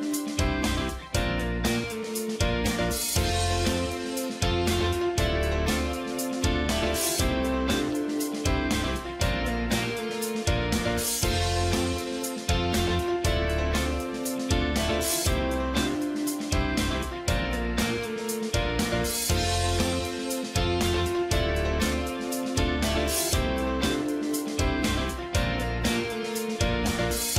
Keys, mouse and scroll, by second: 5.4 click, 7.6-10.6 drag, 11.8-23.6 drag, 26.7 click.